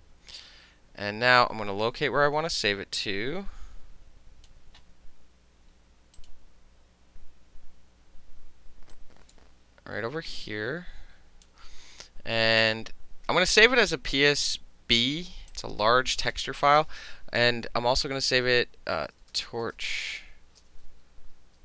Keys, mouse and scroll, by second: 1.5-4.5 drag, 6.2 click, 9.0-11.5 drag, 12.7 click, 15.6 click, 18.9-20.7 typing.